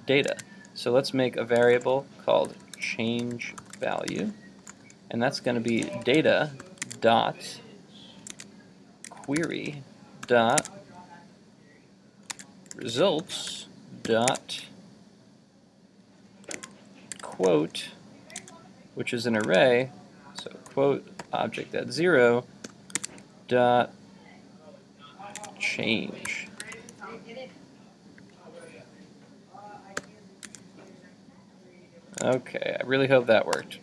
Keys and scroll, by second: 0.3 super+Tab, 6.8 super+Tab, 18.5 super+Tab, 19.5 super+Tab, 23.0 super+Tab, 25.5 super+Tab, 30.5 super+Tab, 32.3 super+Tab.